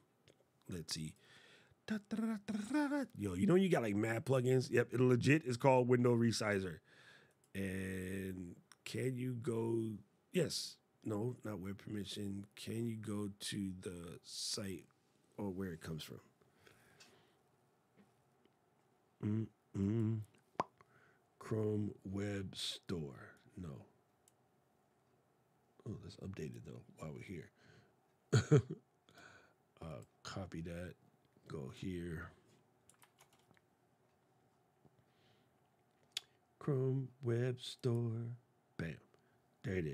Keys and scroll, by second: 32.7 super+v.